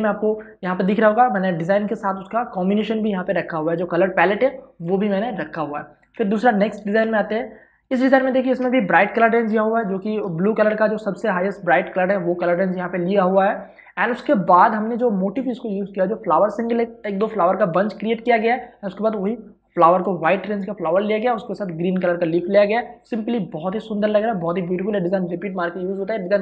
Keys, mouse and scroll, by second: 6.9 ctrl+shift+Tab, 8.0 space, 8.2 ctrl+click, 10.3 i, 10.9 click, 14.3 click.